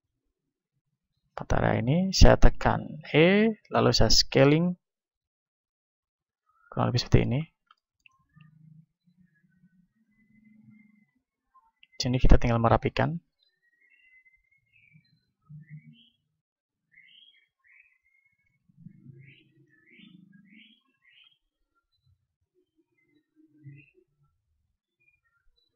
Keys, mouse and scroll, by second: 3.1 e, 3.4-6.1 drag, 4.3 s, 6.4-10.1 drag, 8.6 ctrl+Tab, 10.3 middle click, 10.8-18.4 drag, 11.8-18.4 right drag, 18.4 z, 20.2 z, 20.5 right click, 21.2 right click, 24.5 ctrl+Tab.